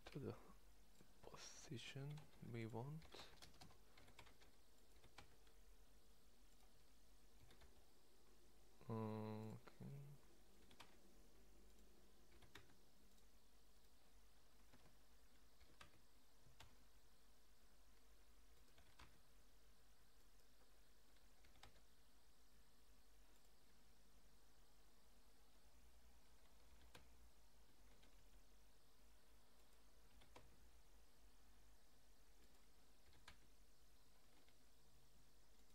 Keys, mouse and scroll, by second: 2.0 g, 3.0 r, 3.9 g, 4.9 g, 7.4 g, 10.6 g, 12.3 g, 14.7 ctrl+Tab, 15.6 r, 18.7 g, 21.4 g, 26.6 r, 30.0 g, 33.1 r.